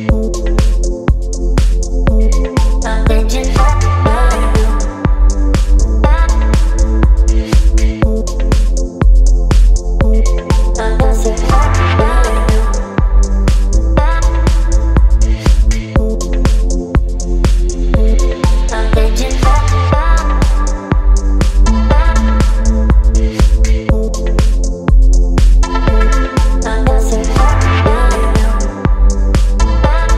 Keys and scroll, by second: 7.0 space, 18.4 Return, 19.6 ctrl+m.